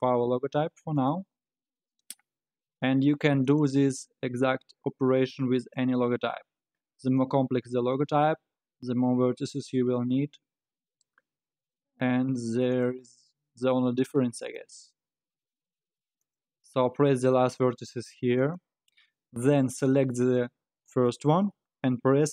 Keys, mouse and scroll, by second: 1.3 e, 5.9 e, 7.6 e, 13.3 e, 14.7 e, 20.9 shift+click.